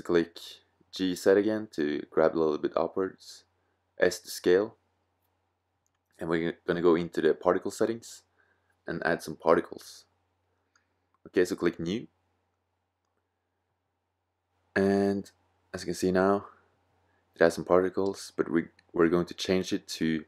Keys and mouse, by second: 3.0 s, 6.9 click, 7.7-8.2 drag, 9.6 middle click, 12.2 middle click, 13.6 click, 14.2-14.9 middle drag, 17.9-20.2 middle drag.